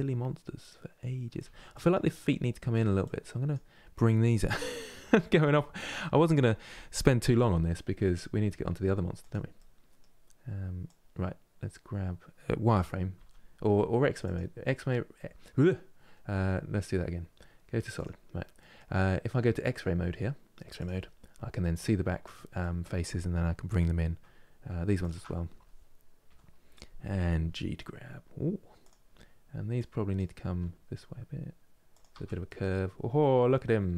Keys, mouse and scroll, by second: 1.1 Tab, 1.4-2.7 middle drag, 2.7-4.2 drag, 4.2-5.2 middle drag, 5.2-6.4 shift+drag, 6.4 g, 9.3-10.6 middle drag, 10.6-12.8 drag, 12.8 z, 16.0 z, 18.3-20.5 middle drag, 20.5-22.3 drag, 22.3-24.7 middle drag, 24.7-26.0 alt+shift+drag, 26.0 KP_1, 27.2 g, 29.5 click, 30.2 g, 31.8 Tab, 32.2-33.9 middle drag.